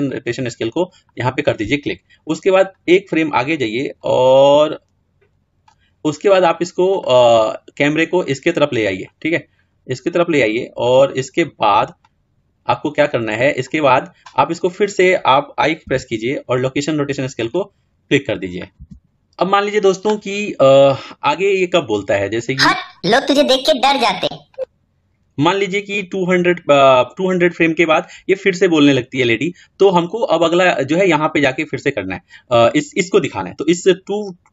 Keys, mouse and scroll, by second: 0.0 i, 3.0 click, 7.0-9.3 middle drag, 9.4-10.6 scroll up 2, 10.6 scroll down 2, 10.7-14.4 shift+middle drag, 17.3 i, 22.2 click.